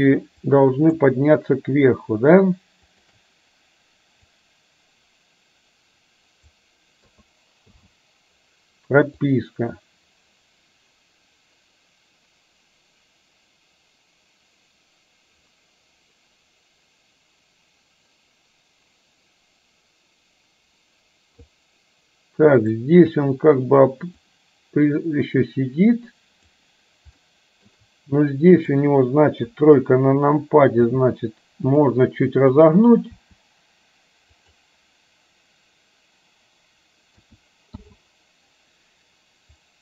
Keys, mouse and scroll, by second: 0.7 click, 4.6-6.6 drag, 7.2 a, 7.8 i, 9.3-21.7 drag, 22.6 click, 24.6-26.7 drag, 27.3-27.7 shift+middle drag, 28.7 click, 29.6 KP_3, 30.9 r, 32.6 click, 33.2 r, 37.3 a, 37.8 i, 39.7-39.8 drag.